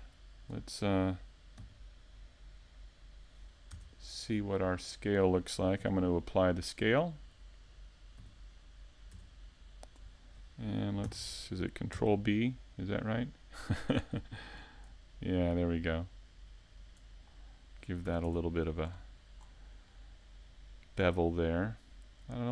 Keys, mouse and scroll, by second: 13.2 middle click.